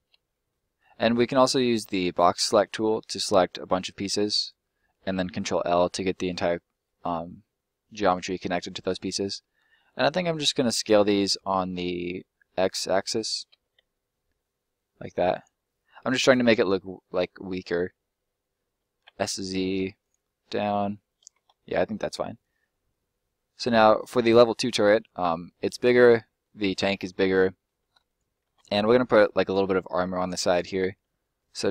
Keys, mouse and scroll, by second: 0.2 middle click, 1.9 right click, 2.5 b, 2.8 click, 5.4 ctrl+l, 6.1 middle click, 13.5 s, 13.8 x, 15.3 click, 15.5 middle click, 17.5 s, 19.0 z, 20.0 click, 20.2 middle click, 21.5 middle click, 23.8 scroll up 1, 23.9 middle click, 25.9 scroll up 1, 26.2 middle click, 27.5 middle click, 28.0 right click, 28.9 right click, 29.3 middle click, 29.8 shift+middle click, 30.1 shift+right click, 30.9 middle click, 31.3-31.7 scroll up 1.